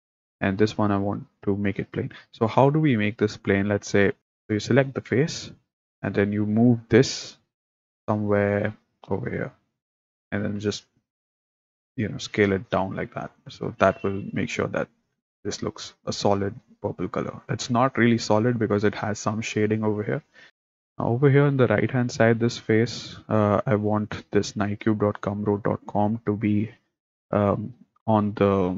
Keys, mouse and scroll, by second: 0.5 click, 4.2 click, 4.9 click, 6.1 click, 7.2 g, 10.4 s, 13.9 click, 14.6 click, 20.5 middle click, 21.2 click.